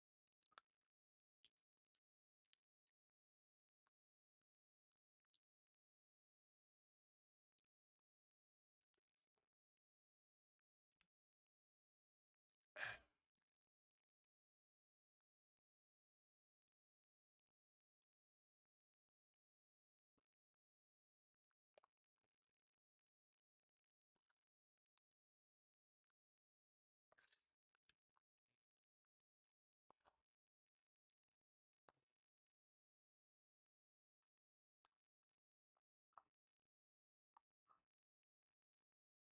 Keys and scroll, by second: 2.3 v, 8.7 v, 10.8 a, 13.2 BackSpace, 23.1 2, 23.3 Return.